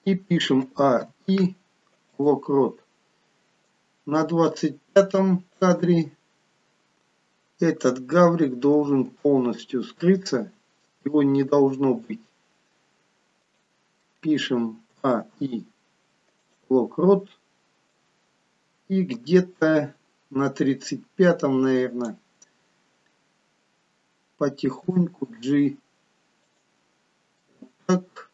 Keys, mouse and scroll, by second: 0.7 a, 1.1 i, 4.0 click, 7.2-9.0 scroll down 2, 9.0 g, 15.5 i, 18.1 click, 25.4 g, 27.6 middle click.